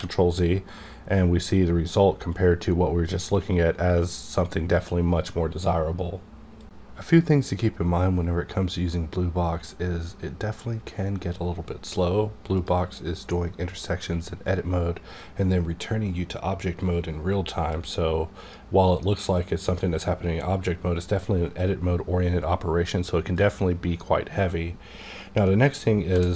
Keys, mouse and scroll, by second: 17.7-20.8 drag, 23.3-25.8 drag, 26.1 click, 26.1 d.